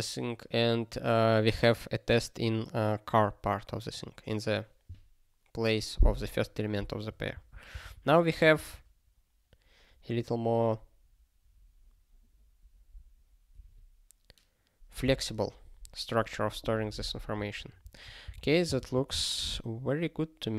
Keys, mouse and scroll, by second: 17.9 click, 18.4 ctrl+s.